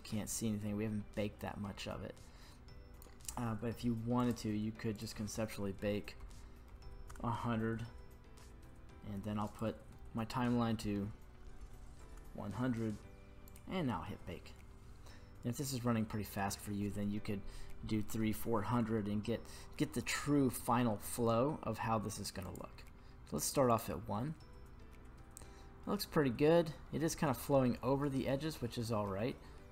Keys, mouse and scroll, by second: 4.2 click, 4.9-7.2 drag, 6.8 KP_0, 9.5-12.1 drag, 11.6 KP_0, 13.5-20.6 drag, 22.4 click, 23.7 click.